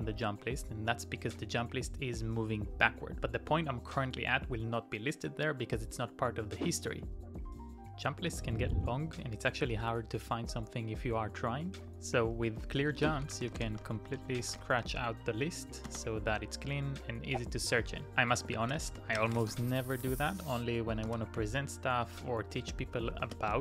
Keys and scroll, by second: 2.9 Up, 5.8 Up, 11.0-16.5 typing, 18.3-23.6 typing.